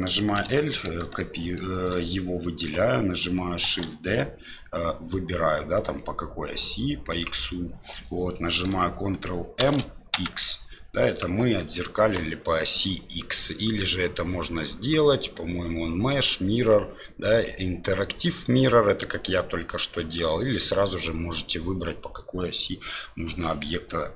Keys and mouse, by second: 1.1 shift+l, 1.2 shift+middle click, 3.6 shift+d, 9.6 ctrl+m, 15.1-23.4 drag.